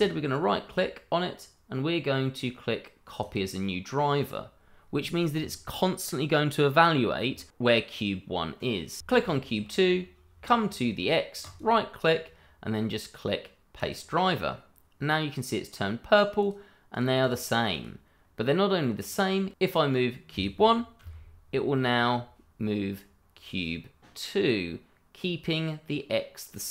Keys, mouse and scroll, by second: 3.2 click, 9.0 Escape, 11.4 right click, 13.7 click, 16.4 click, 17.2 double click, 17.7 click, 19.6 shift+middle click, 20.9 g.